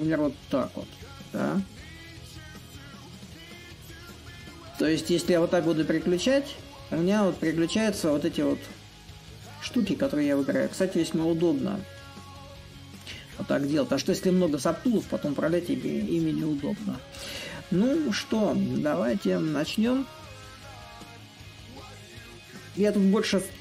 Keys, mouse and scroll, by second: 0.0-5.0 drag, 5.3-10.3 drag, 10.7-15.7 drag, 16.6-18.6 right drag, 18.6-23.6 drag.